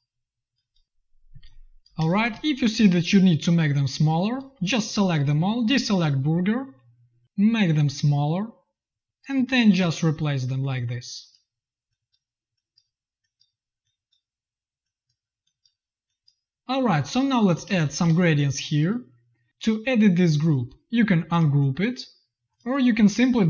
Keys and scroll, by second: 1.2 z, 1.7 v, 1.9 space, 2.2 v, 9.2 z, 9.7 v, 13.3 space, 16.8 z, 17.4 v, 17.6 space, 17.9 v.